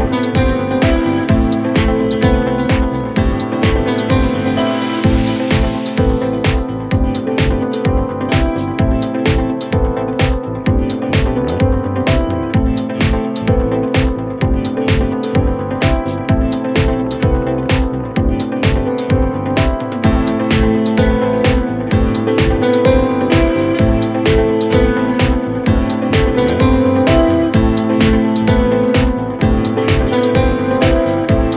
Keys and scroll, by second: 15.6 ctrl+z, 16.5 KP_Add, 23.0 ctrl+r, 24.5 F3, 25.3 ctrl+r.